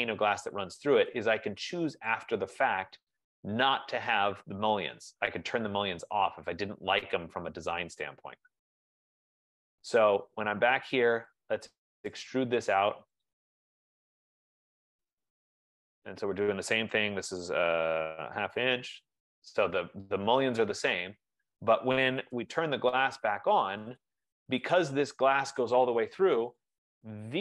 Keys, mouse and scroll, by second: 0.7 shift+click, 1.3 click, 2.4 click, 2.5 shift+click, 3.5 click, 3.7 shift+click, 4.1 click, 4.5 shift+click, 5.1 click, 5.6 shift+click, 6.6 shift+click, 7.3 shift+click, 8.2 shift+click, 8.9-10.2 typing, 11.6 click, 13.5 click, 13.8-15.5 typing, 16.9 F15, 17.3-18.7 typing, 18.7 Return, 21.2 F15, 21.2 click, 22.0-23.4 typing, 24.2 click, 24.9 click, 26.2 Return, 26.7 click.